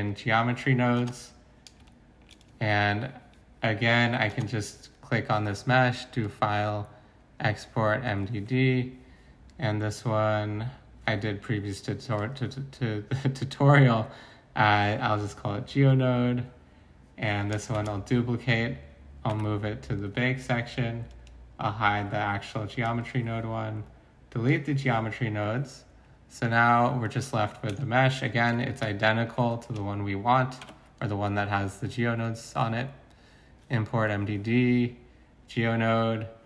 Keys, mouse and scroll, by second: 17.7 d, 19.3 m, 27.3 Tab, 30.6 Tab.